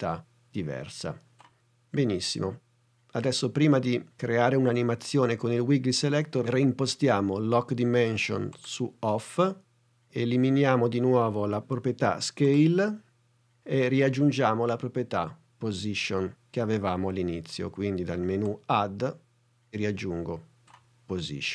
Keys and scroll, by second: 13.1 BackSpace.